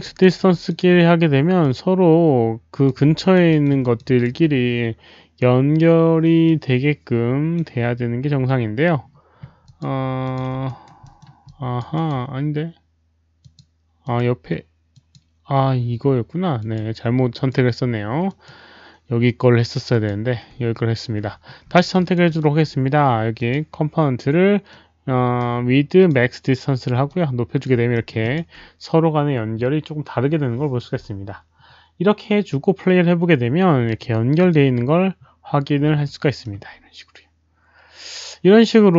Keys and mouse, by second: 0.1 alt+right drag, 0.4 alt+click, 1.5-2.8 alt+drag, 1.5 alt+right click, 3.2 alt+right click, 3.4 alt+middle drag, 3.8 alt+click, 4.0 alt+right drag, 6.4-7.5 alt+drag, 7.5 alt+right click, 7.5 alt+middle click, 9.6 alt+click, 9.6 alt+right click, 9.6 alt+middle click, 10.2 alt+click, 10.6 alt+right click, 11.0 middle click, 11.4 alt+click, 11.9 alt+right click, 13.3 alt+click, 14.0 alt+click, 14.9 click, 15.3 alt+right click, 15.3 alt+middle click, 16.5 click, 16.7 alt+right click, 16.7 alt+middle click, 17.3 alt+click, 17.3 alt+right click, 17.3 alt+middle click, 18.2 click, 19.8 click, 20.0 alt+right click, 20.0 alt+middle click, 21.8 alt+click, 21.9 alt+right click, 22.2 alt+middle click, 23.3 alt+click, 23.3 alt+middle click, 23.3 alt+right click, 24.6-26.0 alt+drag, 25.7 alt+middle click, 25.7 alt+right click, 27.0 alt+click, 27.1 alt+middle click, 27.1 alt+right click, 27.6 alt+right click, 27.9 alt+middle click, 28.2 alt+click, 33.0 alt+click, 33.0 alt+middle click, 33.8 alt+click, 34.4 click, 36.1 alt+middle click, 36.1 alt+click, 36.4 alt+click, 37.9 alt+middle click, 37.9 alt+click.